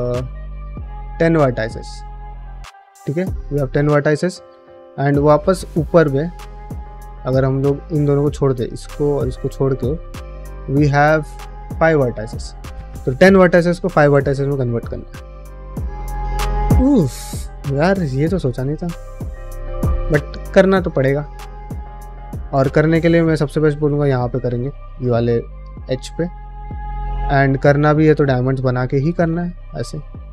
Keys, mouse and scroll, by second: 3.2 middle click, 4.7 click, 4.9 middle click, 5.6 middle click, 6.1 g, 6.7 click, 6.9 g, 7.3 middle click, 7.8 click, 8.4 middle click, 8.9 shift+middle click, 9.7 click, 10.1 ctrl+click, 10.4 middle click, 11.5 shift+middle click, 12.1 middle click, 18.7 middle click, 25.7 click, 26.0 f, 27.4 click, 27.8 g, 28.6 2, 28.9 click, 28.9 f, 29.3 1, 30.2 middle click.